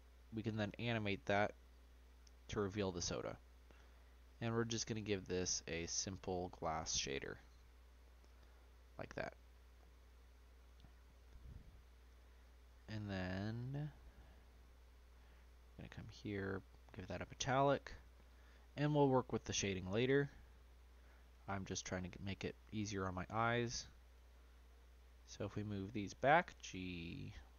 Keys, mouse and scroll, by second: 5.9-10.2 drag, 10.9 click, 11.7-12.0 scroll down 1, 12.0 click, 14.6-15.3 scroll down 2, 15.3-17.0 drag, 17.0 scroll down 1, 17.1-18.0 middle drag, 18.0 click, 18.9-19.3 scroll down 1, 19.3-20.3 middle drag, 20.3-21.0 scroll down 2, 21.0-22.0 scroll up 1, 22.0-22.4 scroll up 4, 22.9 click, 23.7 click, 24.1 shift+click, 25.3 middle click, 26.2 g.